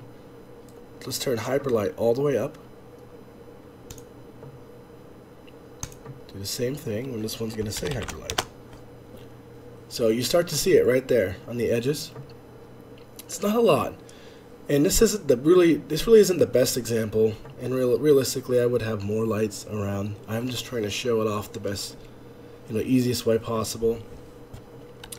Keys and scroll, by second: 8.7 Escape, 8.7 space.